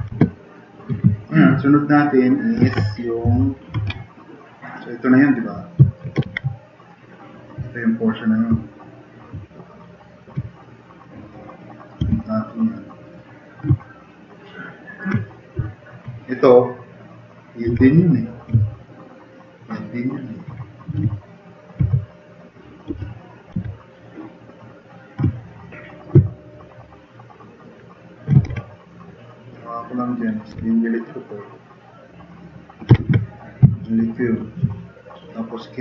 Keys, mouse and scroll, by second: 0.1 alt+q, 3.3 shift+F6, 5.5 click, 6.3 ctrl+z, 10.5 click, 12.0 r, 16.4 r, 17.7 e, 20.9 t, 21.8 w, 22.9 e, 23.5 r, 24.6-26.0 drag, 24.9-25.7 typing, 26.8 click, 27.1 click, 27.3 click, 28.4 e, 28.5 e, 30.1 click, 30.5 f, 32.9 ctrl+z, 33.7-34.5 drag, 34.7 right click.